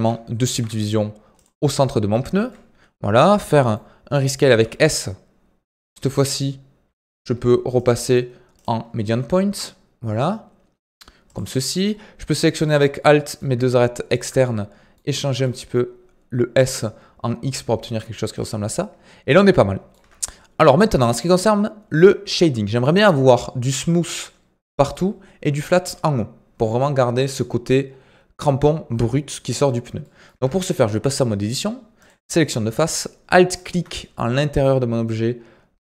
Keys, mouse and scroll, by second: 0.5 ctrl+r, 2.5-4.5 middle drag, 4.5 s, 7.7-9.0 drag, 9.0 s, 11.5-12.5 middle drag, 12.5 alt+click, 12.9-14.1 middle drag, 14.1 alt+shift+click, 14.4 middle click, 15.2 s, 18.6-20.0 middle drag, 20.0 Tab, 20.1-30.3 middle drag, 30.3 Tab, 32.0 click, 33.5 alt+click.